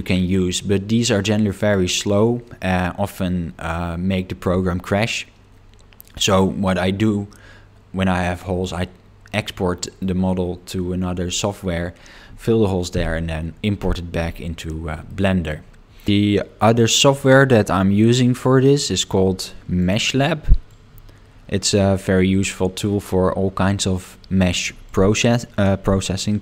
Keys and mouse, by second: 8.6-10.0 middle drag, 15.1 middle click.